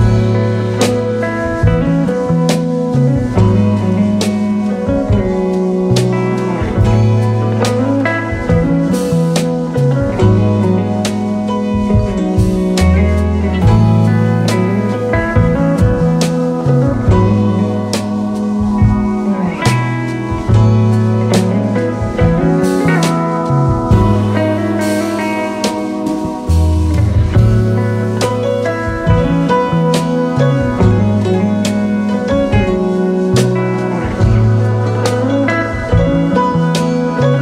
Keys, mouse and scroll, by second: 1.6 space, 2.0 space, 2.5 space, 5.5 alt+scroll up 3, 5.8 space, 10.5 alt+scroll up 1, 12.5 alt+click, 14.1 double click, 14.4 alt+scroll down 5, 14.9 space, 18.0 alt+scroll up 2, 18.7-19.5 space, 22.2-22.8 alt+scroll down 6, 22.8 space, 23.8 ctrl+shift+[, 25.5-26.6 space, 27.8 space, 28.4 alt+scroll up 2, 28.7-29.8 space, 31.0-31.8 space, 37.1 alt+scroll down 1.